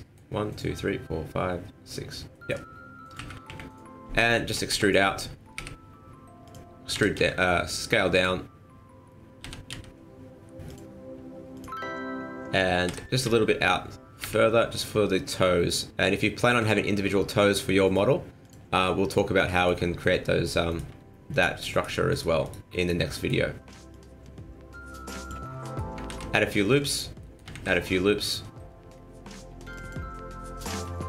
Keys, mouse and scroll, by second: 2.3 middle click, 3.1 KP_1, 3.5 KP_3, 4.3 shift+middle click, 4.5 shift+middle click, 4.7 e, 6.5 n, 6.9 s, 9.4 g, 11.5 click, 12.9 e, 18.4 click, 18.8 middle click, 19.3 scroll down 1, 19.5 middle click, 19.8 shift+middle click, 20.7 right click, 21.3 shift+right click, 21.7 shift+right click, 22.1 right click, 22.5 right click, 22.8 shift+right click, 23.1 middle click, 23.9 click, 25.5 scroll down 2, 25.6 middle click, 26.1 ctrl+r, 27.2 middle click, 27.5 ctrl+r, 30.1 middle click, 30.9 shift+middle click.